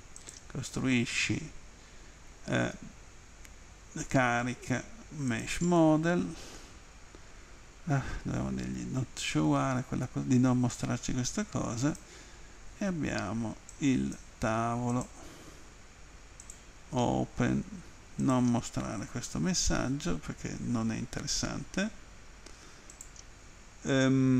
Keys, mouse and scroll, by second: 0.2 click, 5.3 click, 10.7 click, 13.7 click, 14.9 click, 16.5 click, 18.2 click, 22.9 click.